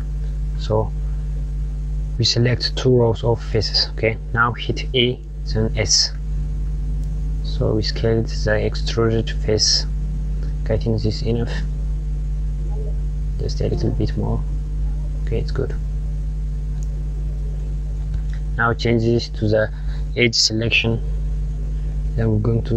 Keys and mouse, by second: 1.8 click, 4.3 e, 10.9 click, 12.9 s, 15.2 click, 20.5 click, 22.0 click.